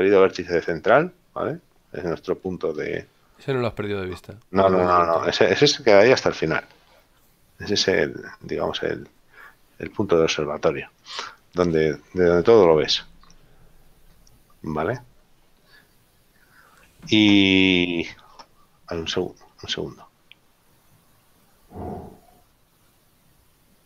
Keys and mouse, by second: 1.0 middle click, 2.7 shift+middle click, 12.7 middle click.